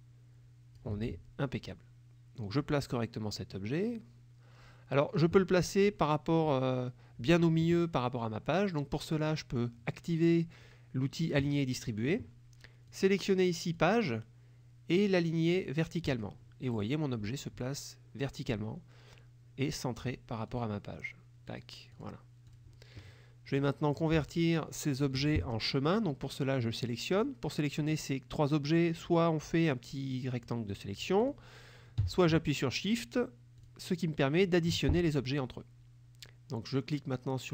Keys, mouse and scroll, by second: 1.8-5.4 drag, 11.5 click, 12.9 click, 13.8 click, 16.1 click, 20.5 click, 21.6 click, 22.0 click, 22.6 click, 23.6 click, 24.3 shift+click, 25.1 shift+click, 27.2 click, 27.9-30.7 drag, 31.3 click, 32.8 shift+click, 33.6 shift+click, 34.4 shift+click.